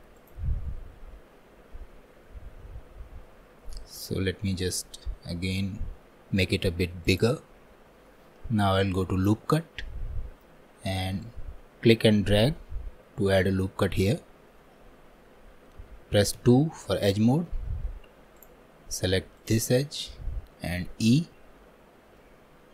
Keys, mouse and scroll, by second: 19.4-21.1 drag, 21.1 e.